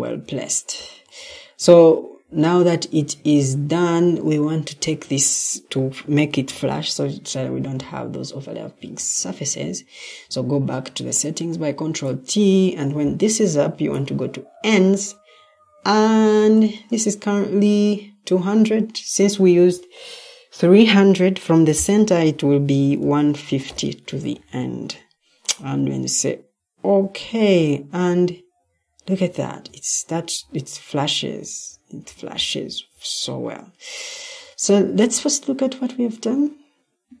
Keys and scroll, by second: 6.2 ctrl+t, 22.7-24.0 typing, 29.6 Escape.